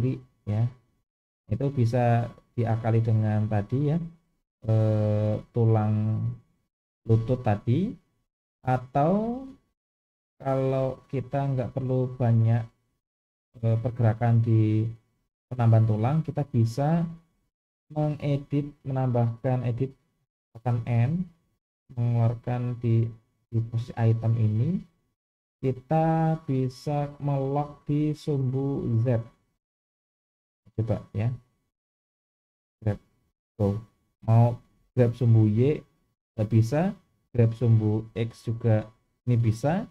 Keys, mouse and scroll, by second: 2.9-4.0 middle drag, 5.5-6.0 middle drag, 8.3-9.4 middle drag, 10.1-13.2 middle drag, 20.9 n, 22.7 click, 29.5 click, 30.2-30.7 middle drag, 31.5-31.9 middle drag, 32.7 g, 37.3 g.